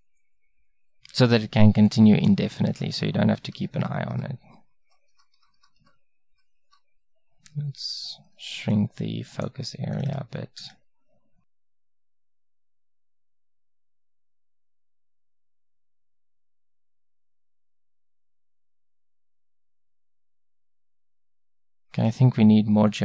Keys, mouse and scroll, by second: 3.6 Right, 4.2 Right, 4.5 Right, 4.9 Right, 5.2 Right, 5.4 Right, 5.8 Right, 6.4 Right, 6.7 Right, 8.4 ctrl+b, 10.0-12.9 drag, 15.1 Right, 15.3 Right, 15.9 Right, 16.8 Right, 16.9 Right, 17.1 Right, 17.6 Right, 17.8 Right, 18.0 Right, 18.2 Right, 18.7 Right, 18.9 Right, 19.1 Right, 19.3 Right, 19.7 Right, 19.9 Right, 20.1 Right, 20.3 Right.